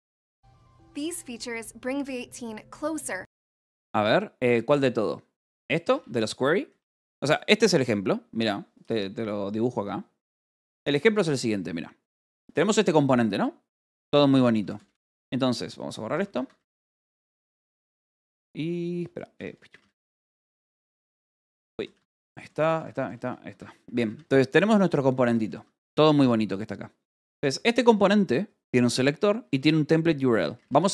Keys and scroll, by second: 10.7-16.5 typing, 10.9 Escape, 16.3 Escape, 17.5-18.5 typing, 19.6 k, 20.6-23.6 typing, 21.2 Escape, 23.4 Escape, 25.2 j, 25.8 k, 27.2 j, 28.4 l, 29.4 j, 30.1 k.